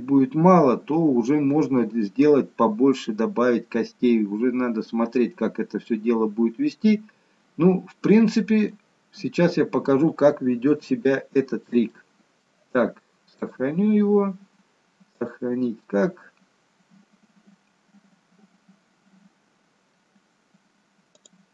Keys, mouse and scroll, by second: 3.8-5.5 scroll down 2, 4.2 middle click, 5.5-6.0 scroll up 2, 6.0 middle click, 9.3-9.7 scroll up 1, 9.7-11.0 scroll down 1, 11.1 shift+middle click, 12.0 middle click, 13.5 click.